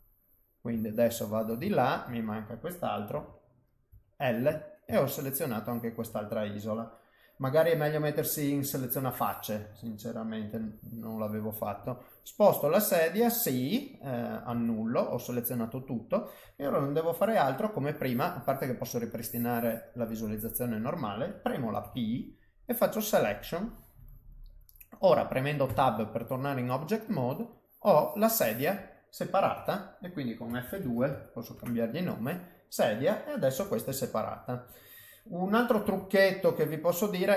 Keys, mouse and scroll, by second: 0.8 shift+middle click, 1.7 ctrl+middle click, 3.1 l, 3.9 l, 5.0 ctrl+middle click, 5.5 ctrl+middle click, 6.2 middle click, 8.7 click, 10.6 g, 12.2 middle click, 14.5 ctrl+z, 14.9 middle click, 19.1 click, 20.1 click, 20.6 middle click, 21.8 p, 23.9 middle click, 25.6 Tab, 26.3 middle click, 27.0 click, 27.5 click, 29.5 F2, 32.3 middle click, 33.5 g, 35.8 ctrl+z, 36.4 middle click, 36.8 middle click.